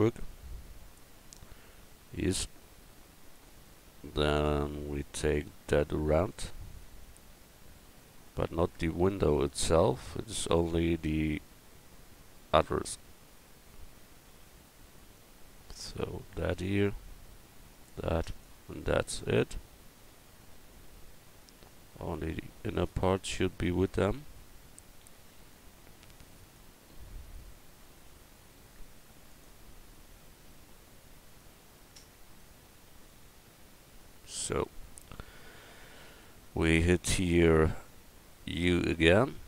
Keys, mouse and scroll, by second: 2.7 middle click, 8.1 Tab, 8.7 Tab, 9.7 Tab, 14.3 c, 18.8-20.9 middle drag, 22.7-25.0 middle drag, 27.9-33.1 middle drag, 33.2-34.7 middle drag, 35.0 middle click, 36.3 middle click.